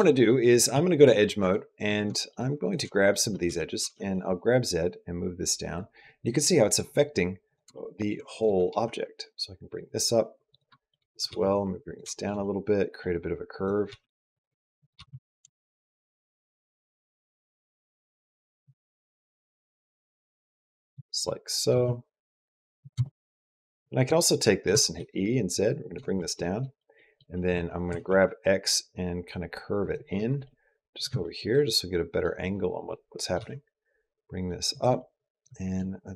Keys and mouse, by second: 0.5 2, 1.0 shift+middle click, 1.9 shift+middle click, 2.8 shift+middle click, 3.2 middle click, 3.6 g, 7.1-8.5 typing, 7.6 shift+click, 10.0-12.2 typing, 10.6 shift+middle click, 11.0 click, 12.0 shift+middle click, 12.2 middle click, 13.2-17.1 typing, 13.4 click, 14.6 click, 15.4 shift+middle click, 15.9 click, 16.9 click, 18.7 shift+middle click, 19.0 click, 19.3 g, 20.9 shift+middle click, 21.5 g, 22.9 shift+middle click, 23.2 click, 23.9 middle click, 24.5 e, 26.2 middle click, 26.9 middle click, 27.7 g, 30.2 middle click, 31.0 shift+middle click, 31.3 middle click, 32.8 middle click, 33.3 g, 34.9 click, 36.0 click.